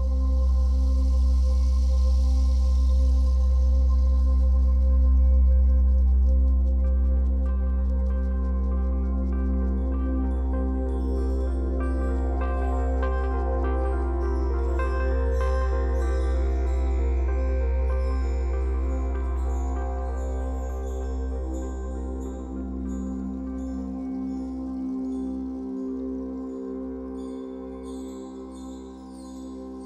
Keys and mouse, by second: 3.7 space, 3.8-6.4 drag, 7.3 space, 8.3 click, 8.7 space, 13.2 space, 15.0-16.3 drag, 18.3 g, 18.7 3, 19.1-19.7 drag, 20.0-21.4 drag, 21.6-22.8 typing, 22.9-23.5 drag, 23.8-24.8 drag, 25.3-25.6 typing, 25.8 click, 26.9-27.4 drag, 28.4 typing, 29.0 click.